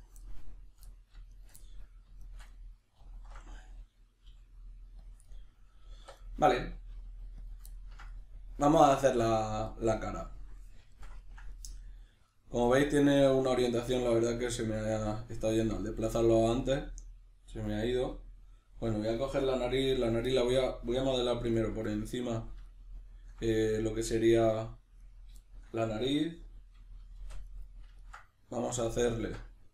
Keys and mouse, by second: 0.2-1.3 middle drag, 1.3 shift+right click, 1.6-2.2 middle drag, 2.2 shift+right click, 2.5-3.0 middle drag, 3.0 alt+q, 5.0 click, 5.2 middle click, 6.0 1, 6.2 right click, 6.9 g, 7.5 click, 7.7-21.5 ctrl+middle drag, 21.5 right click, 21.9-25.0 middle drag, 25.0 right click, 27.2 shift+d, 27.6 right click, 28.0 ctrl+middle click, 28.7 alt+o.